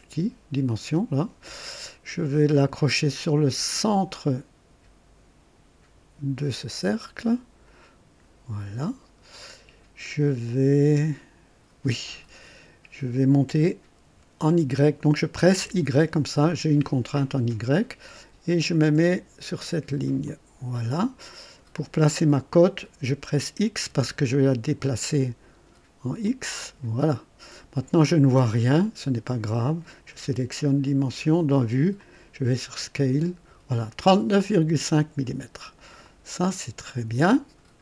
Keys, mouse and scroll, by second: 0.7 click, 7.6 click, 15.5 y, 20.2 click, 23.8 x, 26.2 click, 30.8 click, 32.0 click, 32.6-33.2 scroll up 2, 36.0-37.8 drag.